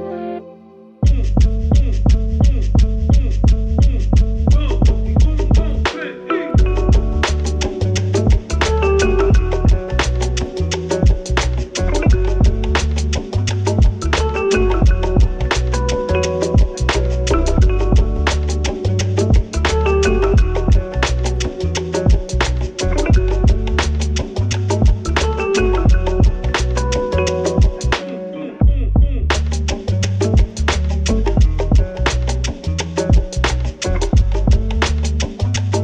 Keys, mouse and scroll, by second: 1.1 click, 8.4-13.9 drag, 14.6 click, 17.8-21.4 typing, 22.2 click, 29.6-35.8 drag.